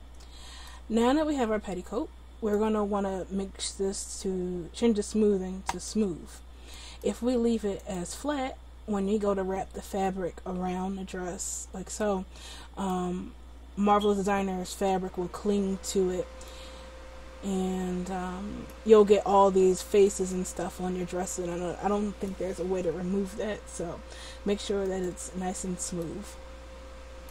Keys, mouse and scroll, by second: 5.7-7.6 drag, 7.9-9.0 drag, 25.0-27.3 drag.